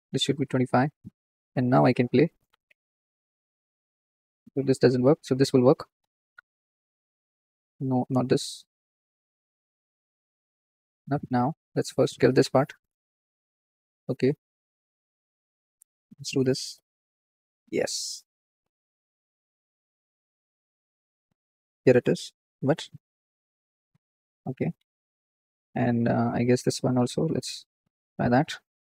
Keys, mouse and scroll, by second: 4.4 ctrl+z, 5.2-7.9 drag, 7.9 ctrl+z, 8.3-10.3 drag, 10.3 ctrl+z, 10.6-12.9 middle drag, 12.9 click, 13.8 ctrl+z, 16.7-17.9 drag, 17.9 ctrl+z, 18.5-24.3 drag, 24.3-27.8 middle drag, 27.8 click, 28.5 scroll down 3.